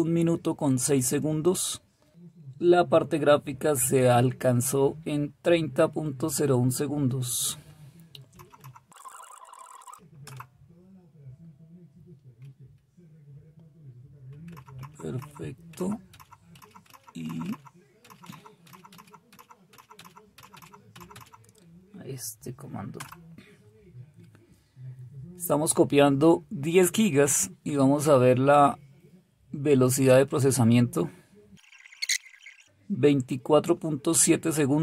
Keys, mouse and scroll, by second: 8.5 Page_Up, 10.2 Return, 14.5-16.5 Up, 14.8-15.7 typing, 17.2 Up, 18.0 Up, 18.6 Up, 18.8 Up, 19.3 Up, 20.0 Up, 20.5 Up, 21.1 Up, 22.9 Return, 31.4-32.2 typing.